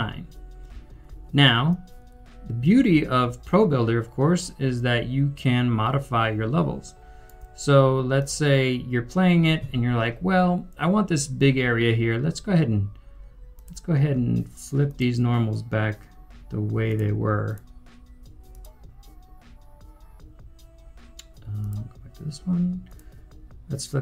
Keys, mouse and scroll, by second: 0.0-2.6 typing, 6.4 typing, 9.5 typing.